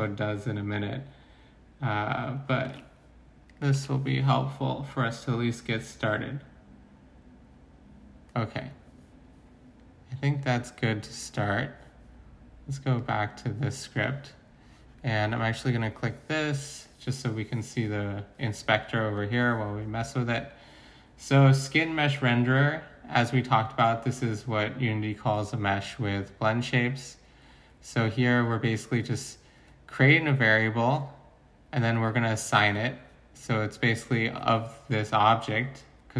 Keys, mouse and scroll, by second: 2.6 ctrl+c, 3.7 ctrl+v.